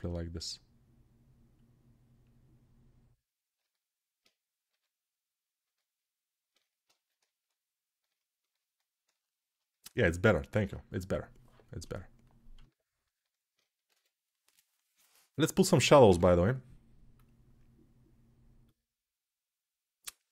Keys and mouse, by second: 3.3-5.5 alt+right drag, 5.5-12.3 alt+middle drag, 12.3-20.3 alt+shift+drag, 13.7 ctrl+s.